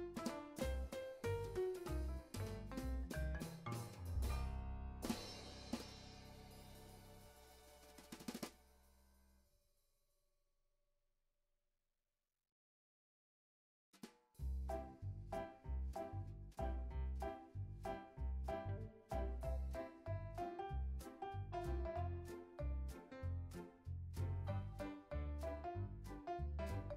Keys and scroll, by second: 0.0 x, 6.3 x, 7.6 z, 8.5 x, 9.7 z, 11.1 x, 12.7 super+s, 13.1 z.